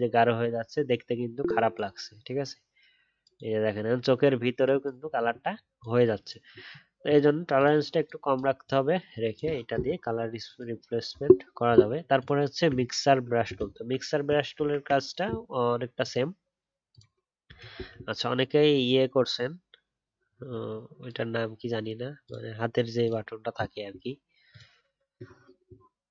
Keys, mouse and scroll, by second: 12.7 alt+scroll down 1, 12.9-13.6 alt+scroll up 1, 13.6 alt+scroll down 2.